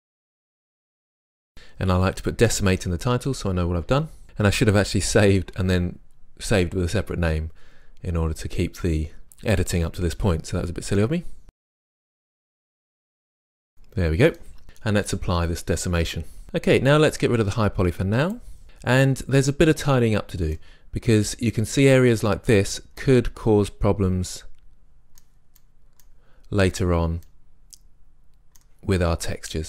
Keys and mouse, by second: 1.5-3.2 drag, 12.5 Return, 12.8 drag, 13.5 Return, 15.1-16.4 drag, 18.6 click, 18.7-19.3 middle drag, 20.2-24.3 middle drag, 24.9-25.6 middle drag, 29.2-29.6 middle drag.